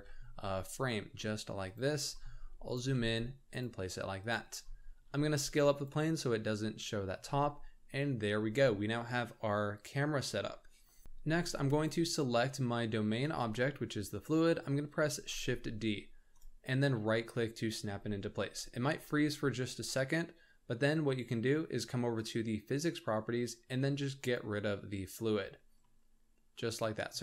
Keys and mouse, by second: 2.0 g, 3.5 g, 4.9 s, 12.5-13.1 middle drag, 13.4 shift+middle drag, 18.0 shift+d, 22.1 click, 24.3 click, 25.8-27.1 middle drag.